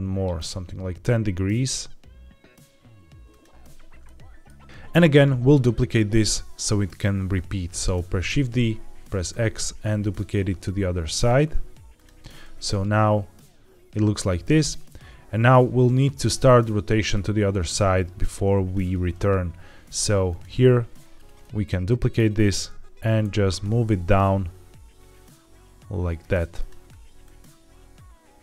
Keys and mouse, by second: 4.0 shift+middle click, 8.2 shift+d, 9.2 x, 11.8 x, 12.6-18.6 drag, 20.2 click, 21.3 middle click, 23.1 shift+d, 26.4-28.4 drag.